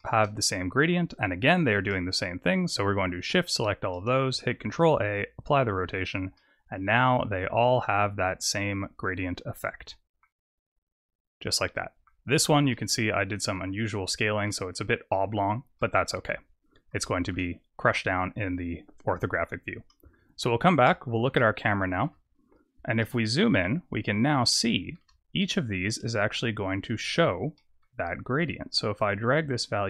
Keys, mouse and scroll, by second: 1.4 click, 2.9 shift+click, 3.8 shift+click, 4.5 ctrl+a, 5.9 click, 6.2 middle click, 10.3-11.7 scroll down 11, 11.6 middle click, 12.2-12.6 scroll up 4, 12.6 middle click, 13.6-14.2 scroll down 1, 14.4 middle click, 15.7 middle click, 16.9 shift+middle click, 19.9 KP_0, 20.8-21.3 scroll up 4, 21.3 shift+middle click, 22.2-22.9 scroll up 4, 22.9 shift+middle click, 23.6-24.3 scroll up 2, 24.4 shift+middle click, 26.5 scroll down 2, 27.5 middle click, 28.9 click.